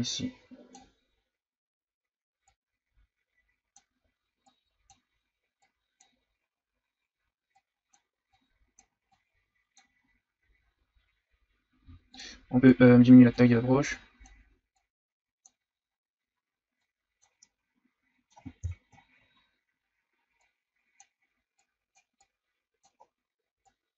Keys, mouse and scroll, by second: 10.0-10.3 scroll down 2, 10.6-11.2 scroll up 4, 11.8 f, 12.7-15.6 drag, 15.6-16.2 scroll down 2, 16.2-16.8 scroll up 1, 16.8 click, 17.3 scroll down 2, 17.4-18.6 middle drag, 18.6 KP_1, 19.2-20.4 shift+scroll up 5, 20.4-23.0 drag, 23.0-23.6 scroll down 2, 23.6-23.9 drag.